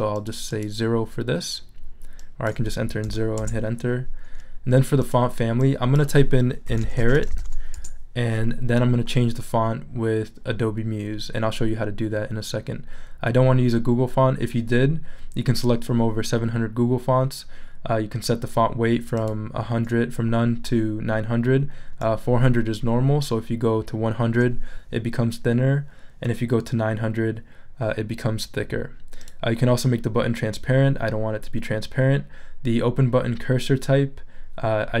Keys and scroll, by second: 3.0 0, 3.4 Return, 6.4-7.9 typing.